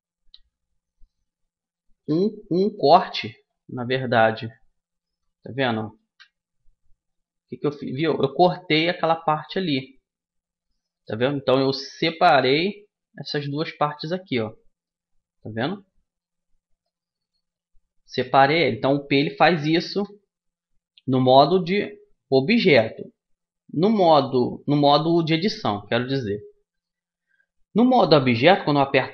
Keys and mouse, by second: 0.9-2.7 drag, 3.1-6.0 drag, 3.3 Tab, 5.7 g, 7.6-10.3 middle drag, 11.9 g, 13.9-17.3 drag, 17.3 middle click, 21.1 Tab, 22.7 Tab, 24.4 Tab, 26.2 Tab, 28.7 p.